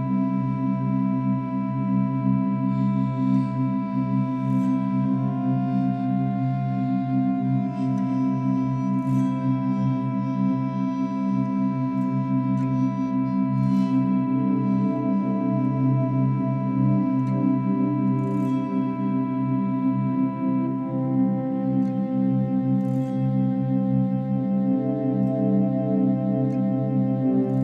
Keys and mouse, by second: 3.0 click, 5.1-9.0 drag, 12.1-18.2 drag, 19.6 click, 20.7-21.4 typing, 21.8 Return, 23.2 ctrl+s, 27.4 click.